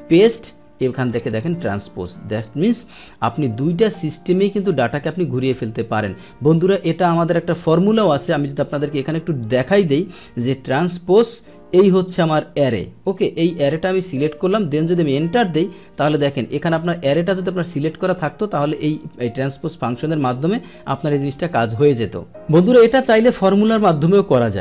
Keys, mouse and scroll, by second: 1.6 click, 2.3-2.6 scroll up 1, 3.5-4.1 scroll down 1, 4.1 click, 5.0 middle click, 7.3 click, 10.4 Tab, 12.0-14.1 drag, 15.0 Return, 16.7-18.9 drag, 20.5 F2, 22.3 Delete.